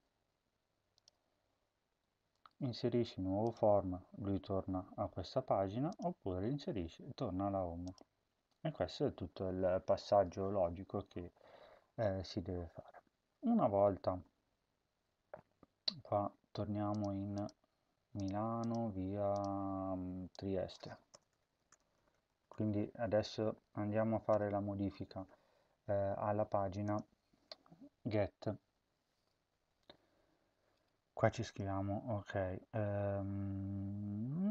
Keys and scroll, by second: 21.0-22.9 typing, 24.2 typing.